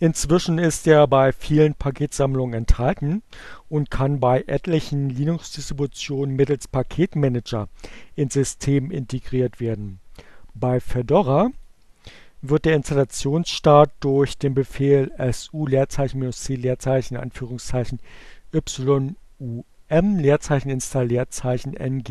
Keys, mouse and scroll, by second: 10.6 click.